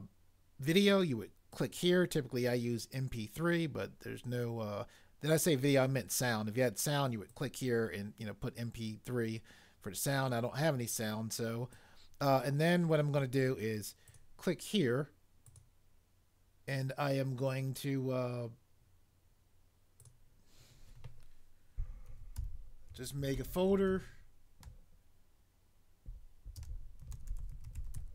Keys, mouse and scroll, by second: 22.1-23.9 typing, 26.5-28.0 typing.